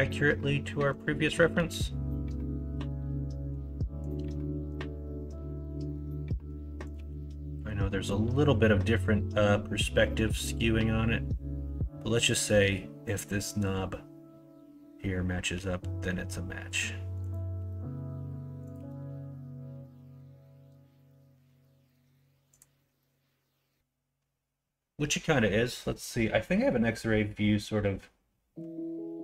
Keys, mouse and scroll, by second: 1.5 g, 4.2 s, 6.9 g, 15.5 g, 17.5 s, 18.7 g.